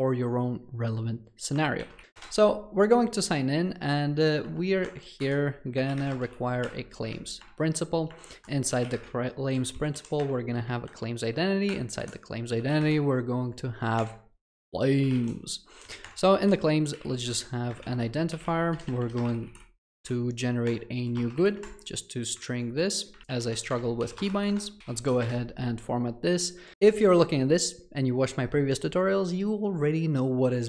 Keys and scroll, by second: 2.2 Return, 6.7 Return, 7.1 Escape, 10.2 Return, 13.4 Escape, 14.0 Return, 23.2 ctrl+z, 23.7 Escape, 24.8 Return, 26.7 Escape.